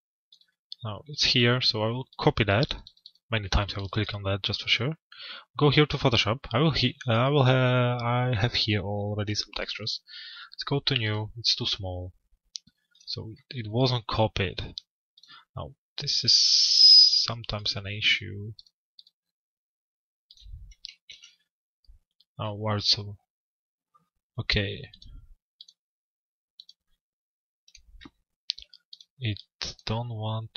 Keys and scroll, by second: 20.6 ctrl+v.